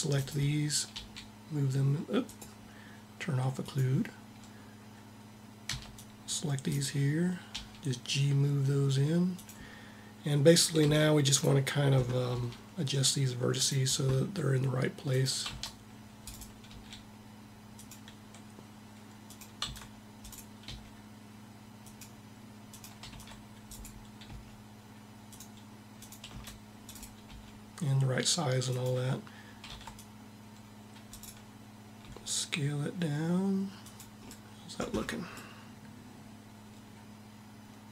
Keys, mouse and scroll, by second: 0.6 g, 1.7 click, 3.4 click, 5.4 c, 7.4 g, 10.1 click, 10.5 c, 12.1 g, 15.1 c, 16.4 g, 19.4 c, 20.4 g, 22.5-24.0 drag, 22.9 c, 24.0 g, 26.0 c, 27.0 g, 29.4 c, 31.9 s, 34.1 middle click, 34.3 middle click, 36.7 middle click.